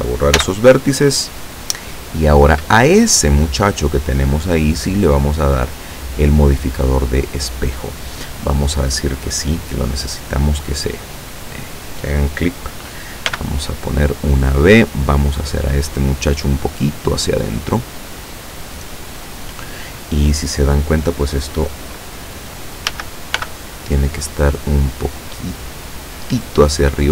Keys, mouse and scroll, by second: 0.4 x, 1.2 click, 2.8 click, 5.8 click, 8.9 click, 13.3 b, 14.0-15.0 drag, 15.8-19.7 drag, 23.0 a, 23.4 b, 24.0 click, 25.2-26.6 drag.